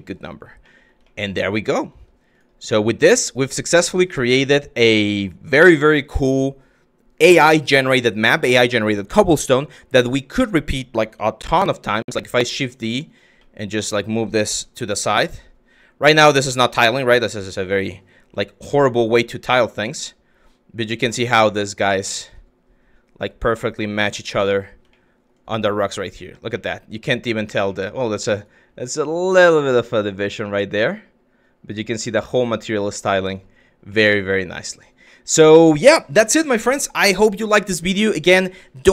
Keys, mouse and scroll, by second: 0.3 middle click, 0.7 shift+drag, 1.5 shift+click, 2.0-2.4 drag, 2.4-3.1 middle drag, 4.0 click, 4.8 shift+click, 11.6 shift+d, 13.1 drag, 14.1 g, 16.1 drag, 16.6 shift+click, 16.8 f, 17.8 g, 19.8 drag, 20.4 g, 24.6 shift+drag, 26.2 drag, 27.4 shift+click, 28.3 g, 33.5 drag, 35.0 click, 35.7 Delete.